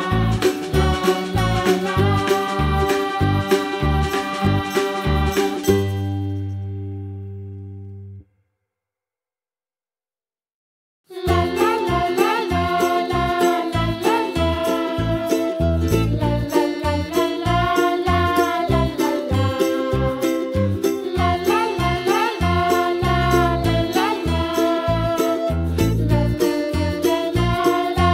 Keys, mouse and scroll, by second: 0.9 click, 1.2 click, 1.6 Tab, 2.2 l, 2.5 p, 3.2 Tab, 3.4 click, 5.9 click, 8.5-9.7 drag, 10.0 click, 10.7-11.1 middle drag, 11.1 scroll up 2, 11.3-12.5 middle drag, 13.5-14.7 drag, 14.7 middle click, 15.4 click, 15.8-17.1 middle drag, 17.6-18.2 drag, 18.2 scroll down 2, 18.4 click, 19.0 click, 19.2-19.6 middle drag, 19.6 click, 20.2 shift+click, 20.6 shift+click, 21.0 g, 22.1-23.3 middle drag, 23.4 click, 23.9 Tab, 24.3 l, 25.2 click, 25.7 l, 26.2 p.